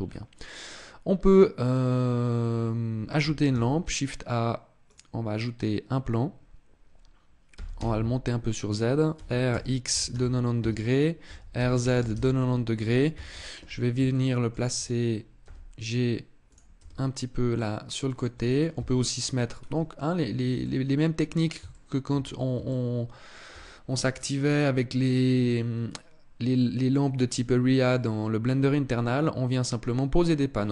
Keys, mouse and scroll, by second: 0.2 scroll up 1, 3.2 shift+a, 7.2 g, 8.8 click, 8.8 r, 10.9 r, 12.8 KP_7, 13.8 shift+middle click, 15.1 g, 16.2 click, 16.4 r, 17.8 click, 18.4 KP_3, 19.2 scroll down 2, 20.3 middle click, 21.4 shift+middle click, 21.8 scroll up 3, 22.3 shift+middle click, 25.1 middle click, 27.6 middle click.